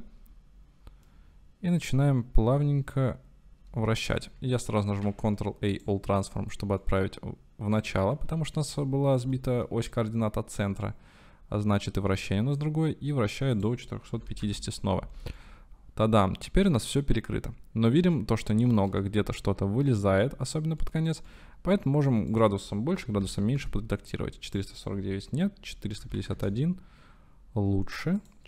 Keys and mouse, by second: 1.9-4.1 middle drag, 5.1 ctrl+a, 7.0 middle click, 9.3 shift+middle click, 10.9-12.7 middle drag, 15.5-16.9 middle drag, 18.1-18.4 shift+middle drag, 19.1-20.0 shift+middle drag, 21.4-21.9 shift+middle drag, 22.5-27.4 middle drag, 23.1 KP_4, 28.3-28.4 middle drag.